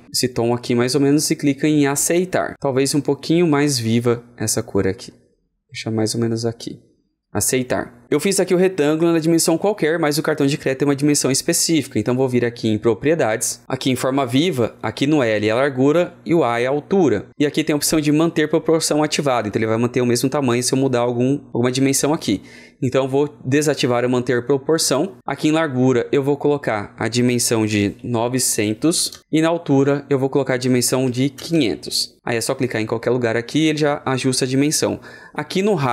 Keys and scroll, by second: 27.3 ctrl+a.